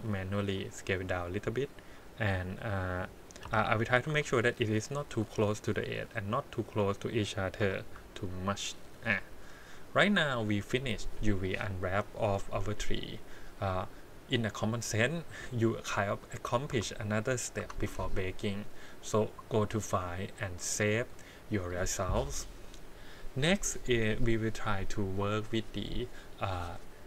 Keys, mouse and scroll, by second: 0.4 s, 1.9 click, 3.5 l, 4.1 s, 5.2 g, 6.3 click, 7.6 l, 8.3 g, 9.6 click, 10.0-10.5 scroll down 2, 10.5 scroll up 2, 14.5 click, 16.7 Tab, 17.6 Tab, 19.2-21.0 drag.